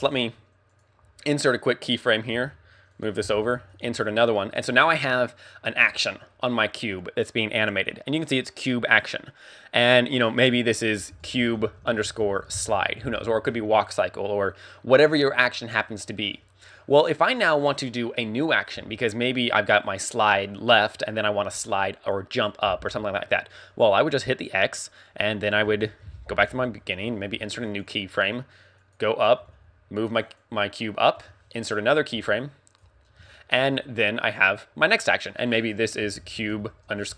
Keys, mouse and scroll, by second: 0.9 i, 1.1 scroll down 2, 1.9 click, 2.3 g, 3.9 i, 4.7 click, 12.6 click, 24.3 click, 26.0 shift+Left, 27.9 i, 28.8 click, 29.4 g, 31.8 i, 32.3 right click, 32.3 d, 33.1 scroll down 3, 33.4 shift+middle click, 33.7-34.1 scroll up 1.